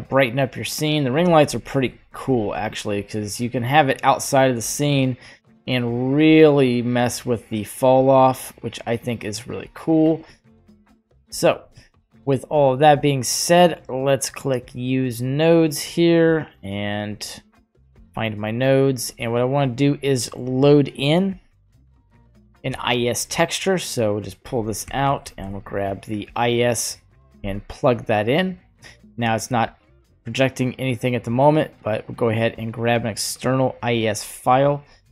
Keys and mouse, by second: 1.9 g, 5.4-10.2 drag, 10.8 shift+click, 11.8-12.5 middle drag, 13.0 middle click, 15.8 click, 16.8 click, 17.0 drag, 18.2 middle click, 20.2 middle click, 21.0 click, 21.7-22.7 drag, 24.2-27.3 drag, 27.0 typing, 32.5 click, 33.2 click.